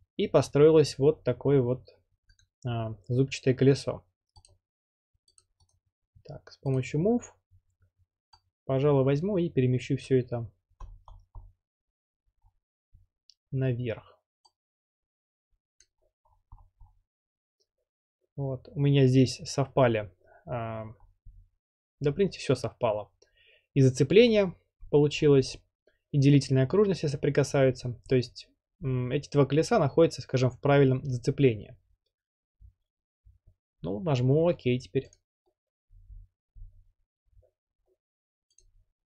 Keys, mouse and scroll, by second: 2.4 click, 4.5 click, 5.4 click, 5.7 right click, 6.8 click, 10.0 click, 10.5-11.5 scroll, 12.5 scroll down 1, 12.9 scroll, 15.8 click, 16.2-17.0 scroll, 21.0-21.5 scroll up 7, 21.5-21.9 scroll, 21.9-23.1 scroll up 2, 23.1 scroll up 1, 24.4-25.0 scroll down 9, 25.2-25.6 scroll up 10, 25.6 scroll, 27.6-30.0 middle drag, 27.6-28.2 scroll, 28.8 scroll, 33.1-34.2 middle drag, 33.1-33.6 scroll, 35.1 click, 38.6-39.1 drag.